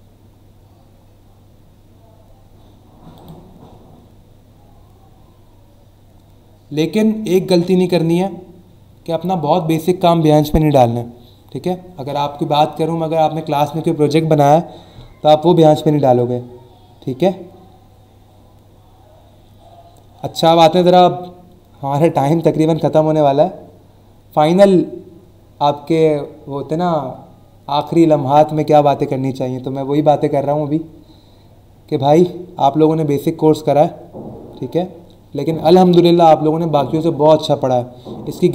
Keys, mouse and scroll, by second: 0.2-1.2 scroll down 3, 1.6 scroll down 1, 3.1 click, 3.9 scroll down 1, 4.5-4.9 scroll down 1, 5.4 scroll down 1, 6.1 scroll down 1, 6.8 scroll down 1, 7.5-8.0 scroll down 2.